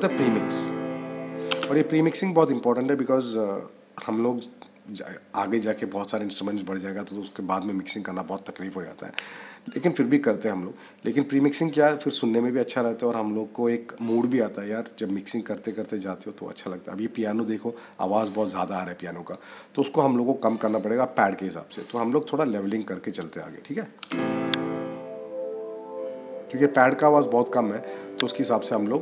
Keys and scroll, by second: 1.4 space.